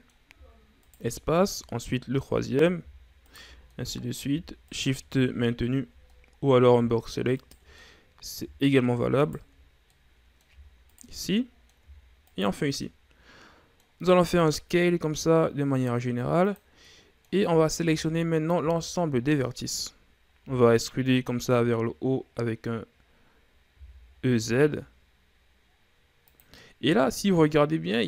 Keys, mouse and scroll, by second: 1.1 shift+right click, 1.8-2.1 ctrl+scroll up 2, 2.1 middle click, 2.7 ctrl+scroll up 2, 3.6 shift+right click, 4.0-5.0 middle drag, 5.0 shift+right click, 5.4 ctrl+scroll down 1, 5.7-6.4 ctrl+scroll up 6, 6.4-7.7 middle drag, 7.7 shift+right click, 8.1-9.5 middle drag, 9.5 shift+right click, 10.2-11.2 middle drag, 11.2 shift+right click, 11.6-12.6 middle drag, 12.6 shift+right click, 12.9 scroll down 2, 13.2-14.6 middle drag, 14.6 s, 17.2 middle click, 17.8 a, 18.1 a, 19.1-19.6 shift+scroll up 2, 19.6-20.7 middle drag, 20.7 e, 26.9-28.0 middle drag.